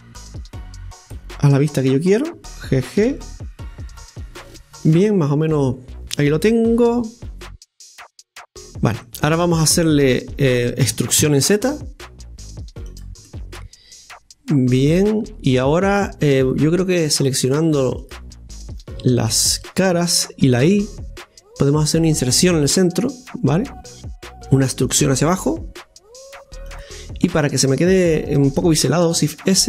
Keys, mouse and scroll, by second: 1.8 right click, 3.0 g, 4.8-7.0 middle drag, 7.4-8.4 drag, 8.4 middle click, 9.3-10.8 scroll down 1, 10.8 e, 13.3-16.2 middle drag, 17.5 click, 18.1 click, 19.0 shift+right click, 19.3 shift+right click, 23.9-25.0 middle drag, 27.8-29.1 middle drag, 29.1 shift+s.